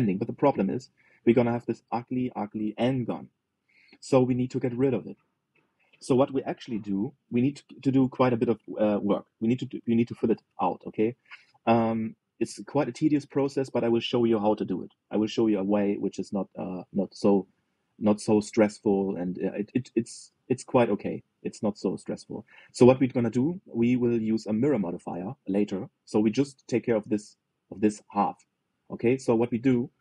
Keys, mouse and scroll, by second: 0.6 shift+middle click, 1.1 scroll up 3, 1.5-4.1 middle drag, 6.6 scroll down 1, 11.3-11.8 scroll down 2, 11.8-16.8 shift+middle drag, 17.9-19.7 middle drag, 19.7 scroll down 1, 19.9-25.7 middle drag, 26.2-28.7 middle drag, 29.4-30.0 middle drag.